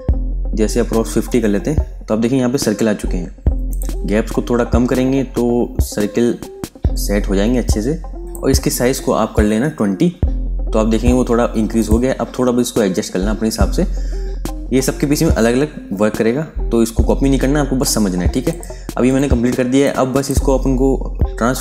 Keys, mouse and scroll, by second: 0.9 KP_5, 1.2 KP_0, 1.5 Tab, 3.6 click, 4.0-6.6 scroll down 1, 8.2 click, 8.8 ctrl+a, 9.2 KP_2, 9.4 KP_0, 9.5 Tab, 11.6 click, 12.0-16.9 scroll up 1, 18.4 click.